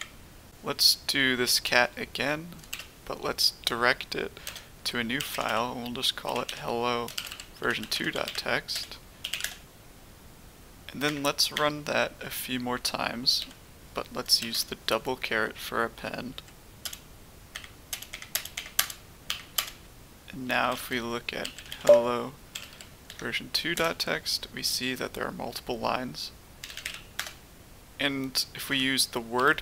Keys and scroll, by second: 2.7 typing, 4.9-9.7 typing, 11.5 Up, 12.2 Left, 12.7 Left, 12.8 Left, 13.2 Left, 13.4 Left, 14.4 typing, 15.6 Right, 16.1 Right, 16.2 Right, 16.8 Return, 18.1 Up, 18.3 Left, 18.5 Return, 18.8 Up, 19.3 Return, 19.6 Up, 20.4 Return, 20.7 Up, 21.3-23.6 typing, 23.7 Tab, 26.4-27.3 typing, 28.7-29.3 typing.